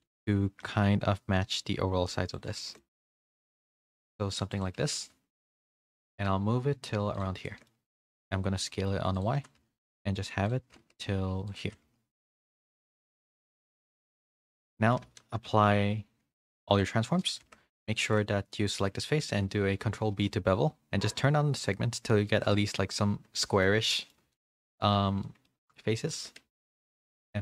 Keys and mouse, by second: 0.1 shift+middle drag, 0.6 g, 2.6 shift+middle drag, 3.1 s, 4.9 g, 7.4-7.7 shift+middle drag, 8.0 s, 9.3 g, 10.7 s, 11.6 g, 13.7 z, 14.0 middle drag, 15.0 ctrl+a, 17.4 Tab, 17.6 3, 17.8 click, 18.1-18.8 middle drag, 19.2 ctrl+b, 23.4 middle drag, 23.9 middle click, 24.3 shift+middle drag, 25.3 middle click, 26.1 1, 26.4 a, 26.8-27.4 right drag.